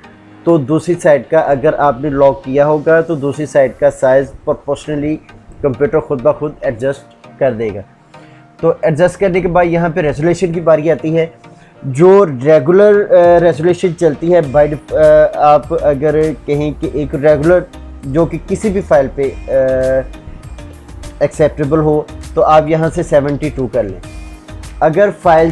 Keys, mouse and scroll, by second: 9.5-10.1 drag, 25.4 Tab.